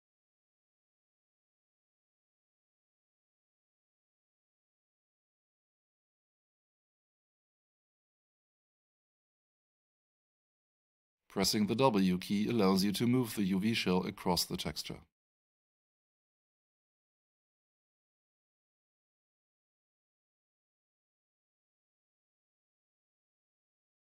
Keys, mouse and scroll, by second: 2.9 r, 4.8 click, 6.0 scroll up 1, 7.6 click, 11.5 w, 12.9 click, 21.3 r, 22.7 w, 23.8 e.